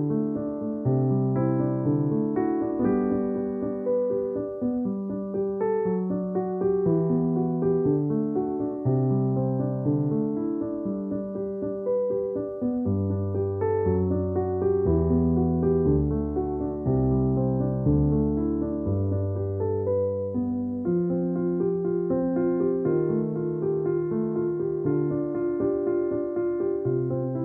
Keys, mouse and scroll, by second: 1.4-4.7 typing, 1.6 click, 5.7 click, 7.0 ctrl+e, 7.3 space, 9.2 ctrl+m, 9.9 click, 11.5 click, 13.8 right click, 16.1 click, 16.9 space, 17.1 click, 17.2 space, 18.1 click, 18.3 click, 18.9 ctrl+alt+click, 21.6-23.3 typing, 25.2 ctrl+shift+f, 25.9 click, 27.0 space, 27.1 click.